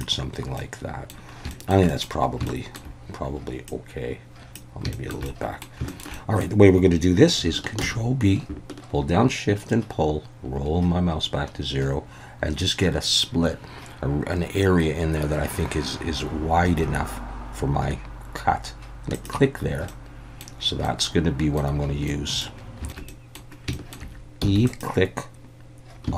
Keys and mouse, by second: 0.6 middle click, 1.5 shift+middle click, 1.9 middle click, 2.4 shift+middle click, 3.7 click, 4.9 shift+middle click, 5.2 middle click, 5.9 shift+middle click, 6.1 middle click, 7.8 ctrl+b, 19.1 shift+click, 19.9 middle click, 20.9 middle click, 22.1 middle click, 22.6 shift+middle click, 23.8 shift+middle click, 24.4 e, 24.7 click.